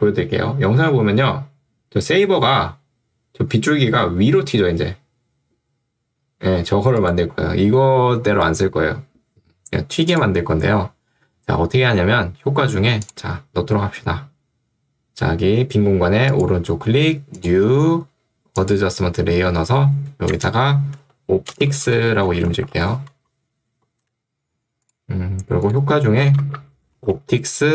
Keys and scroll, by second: 20.4 Return, 21.0-23.3 typing, 26.4 ctrl+space, 26.7-27.7 typing.